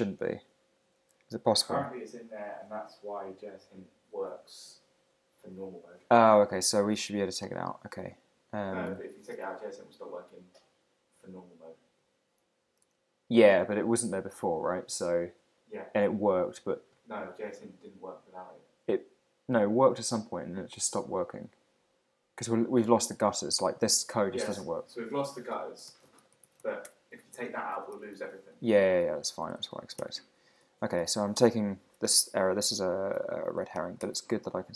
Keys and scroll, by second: 4.2 super+Tab, 8.9 super+Tab, 9.3 super+t, 11.1 super+Tab, 12.4 ⟲, 12.8 super+Tab, 25.2 super+Tab, 25.5 super+t, 26.8 Return, 27.3 super+f, 28.8 Escape, 29.5 super+/, 30.0 super+s, 31.0 super+Tab, 33.1 super+`, 34.0 super+r.